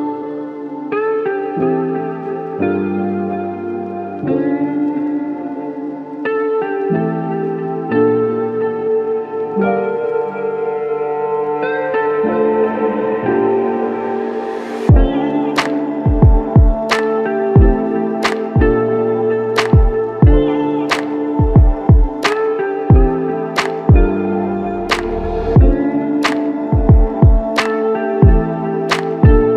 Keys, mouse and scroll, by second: 13.1 alt+click, 19.6 ctrl+alt+click, 20.3 alt+click, 29.0 alt+shift+click.